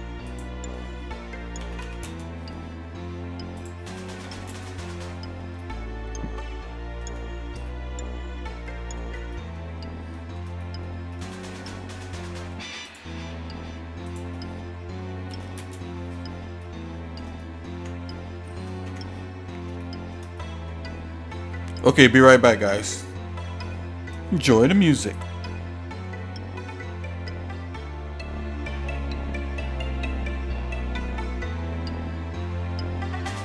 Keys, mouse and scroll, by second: 0.3-2.1 drag, 3.7 click, 5.6-7.0 shift+middle drag, 7.7 shift+middle click, 8.8 shift+middle click, 9.3 middle click, 10.2 shift+middle click, 10.6 shift+middle click, 11.1 shift+middle click, 12.0 middle click, 12.4 middle click, 12.9 click, 14.1-15.9 drag, 16.7 shift+middle click, 17.4 middle click, 17.8 Tab, 18.1 middle click, 18.9 Tab, 19.2 middle click, 19.8 shift+middle click, 20.4 middle click.